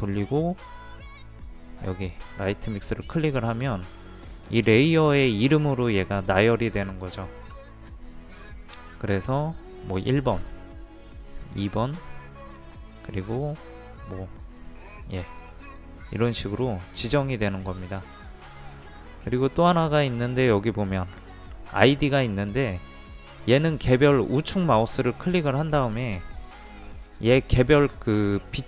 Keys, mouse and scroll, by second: 24.9 right click.